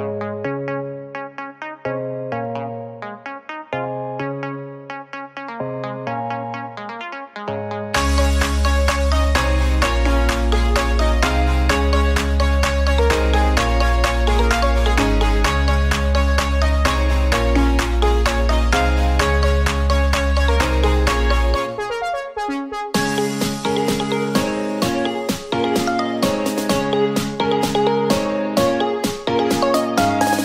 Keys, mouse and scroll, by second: 2.5-5.2 drag, 5.7-7.0 drag, 8.4-9.2 middle drag, 9.2 click, 10.6 Tab, 10.9-11.5 scroll up 4, 11.5 shift+middle click, 12.1 s, 13.2 middle click, 14.2 click, 19.8 ctrl+z, 20.2 f, 21.8 click, 24.5 r, 29.5-30.4 middle drag.